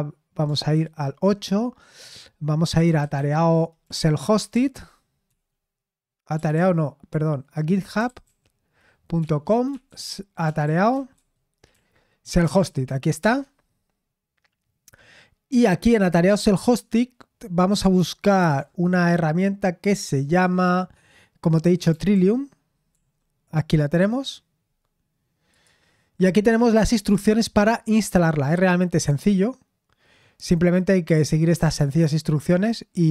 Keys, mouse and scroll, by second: 0.7 super+8, 2.5-5.2 typing, 5.2 Right, 7.2 Right, 7.3 BackSpace, 7.6 Left, 9.6 BackSpace, 10.7-13.6 typing, 18.6 typing, 21.6-22.8 typing, 25.4 click, 28.7-29.5 scroll down 1.